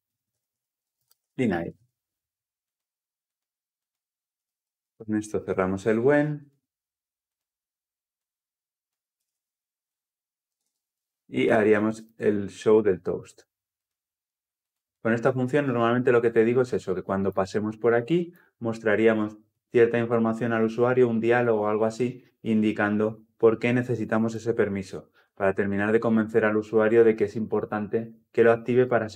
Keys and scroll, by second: 10.5 ctrl+alt+l, 10.6 ctrl+alt+o.